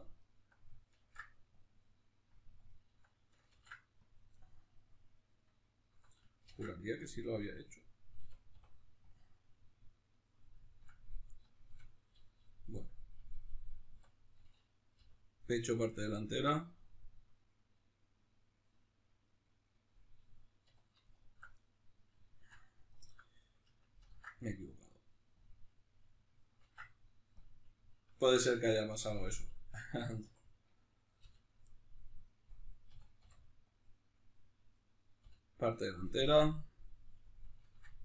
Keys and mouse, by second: 0.2 alt+right click, 1.0 ctrl+e, 2.7 alt+right click, 3.5 ctrl+e, 4.4-5.8 middle drag, 5.8 alt+right click, 6.4 ctrl+e, 8.2 a, 10.1-14.1 middle drag, 14.0 3, 14.1 right click, 15.0 l, 15.7-21.2 middle drag, 20.6 2, 21.2 alt+right click, 21.6-22.9 middle drag, 22.9-24.0 alt+right drag, 24.0 ctrl+e, 27.8-30.5 middle drag, 30.2 3, 30.5 right click, 31.2 l, 31.7-34.7 middle drag, 32.9 a, 34.7 right click, 35.2 l, 36.2-38.0 middle drag.